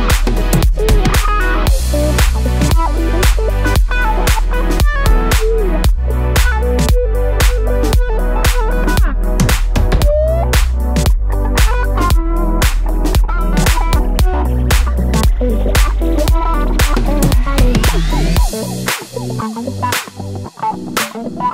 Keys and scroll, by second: 8.5 super+z.